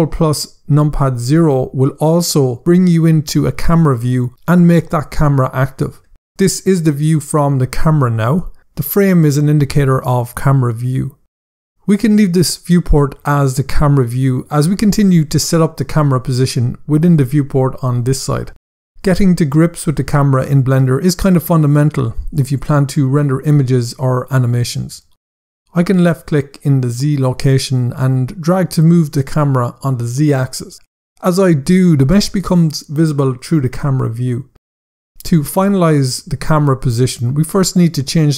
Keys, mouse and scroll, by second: 0.5 ctrl+KP_0, 25.9 click.